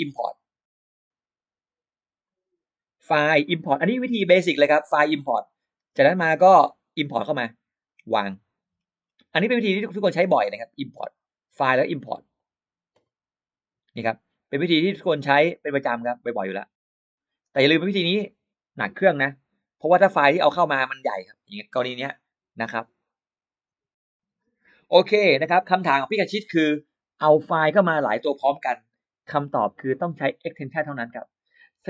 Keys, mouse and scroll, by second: 0.5 click, 2.1 click, 6.1 click, 6.3 click, 8.1 click, 8.5-9.2 scroll up 2, 9.3 scroll down 1, 10.0 click, 12.2 click, 14.7 click, 14.8 click, 17.0 middle click, 17.4 middle click.